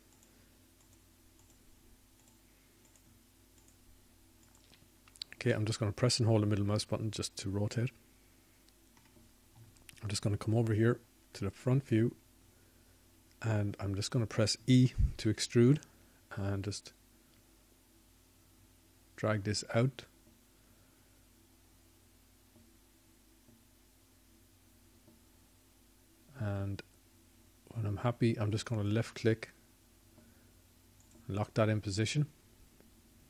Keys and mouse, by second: 0.3 shift+click, 0.8 shift+click, 8.9 click, 21.3 e.